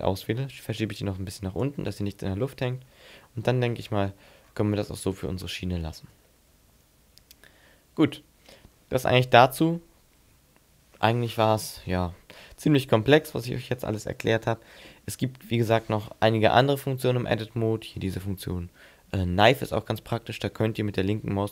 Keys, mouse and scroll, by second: 0.5 click, 2.2-2.7 scroll down 6, 3.2 Tab, 3.6-4.4 scroll down 4, 4.2 scroll up 5, 4.8-5.4 scroll down 4, 5.7 shift+middle click, 6.2 middle click, 16.5 Tab, 16.8-17.6 scroll up 5, 19.6 click.